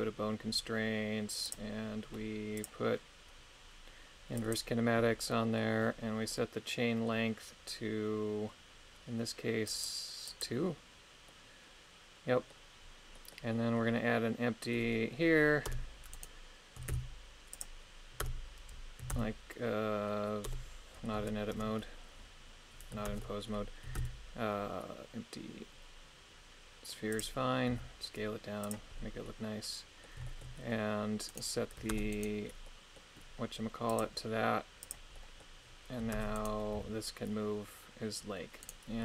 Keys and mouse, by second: 1.5 click, 2.6-4.6 drag, 5.3 middle click, 6.3-9.7 middle drag, 9.7 click, 10.3 click, 11.3-15.7 middle drag, 15.7 Tab, 16.2 right click, 16.9 shift+s, 18.3 Tab, 19.1 shift+a, 20.5 Tab, 21.6 Tab, 23.1 ctrl+Tab, 24.0 shift+a, 27.7 s, 28.6 click, 29.3-30.5 middle drag, 31.3 right click, 32.0 ctrl+Tab, 32.1 right click, 32.7 middle click, 33.9 click, 34.8 click, 35.1 middle click, 36.2 ctrl+Tab, 36.4 right click, 36.8 g, 38.6 right click.